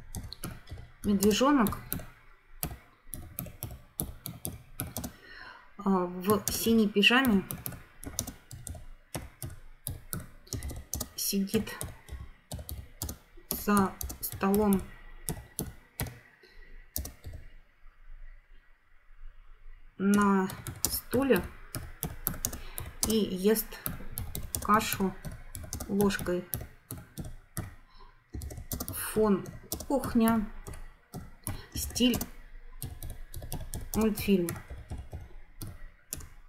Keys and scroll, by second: 0.0-5.3 typing, 6.3-17.3 typing, 20.1-36.4 typing.